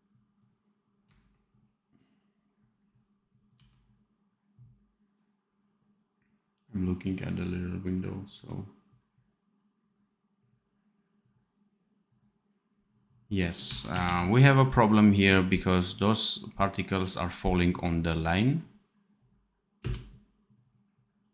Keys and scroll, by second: 3.4 d, 13.6 d, 14.0 ctrl+s, 19.7 space.